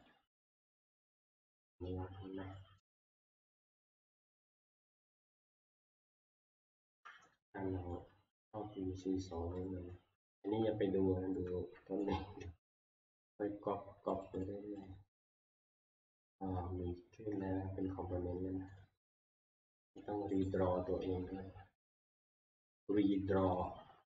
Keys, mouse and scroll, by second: 0.1 click, 1.0 click, 1.7 scroll, 2.8 scroll, 3.0 alt+Tab, 3.4 alt+Tab, 5.0 alt+Tab, 5.3 alt+Tab, 7.5 middle click, 7.9-9.1 shift+middle click, 8.3-8.9 middle click, 8.4 middle click, 8.5 middle click, 8.5 shift+middle click, 8.8 middle click, 9.3-9.9 scroll, 10.9 scroll, 11.3-12.1 shift+middle click, 12.0 middle click, 12.3-13.1 scroll, 14.2 click, 14.4 click, 14.9 click, 18.8 click, 20.0 click, 20.5 right click, 23.6 click, 24.1 right click.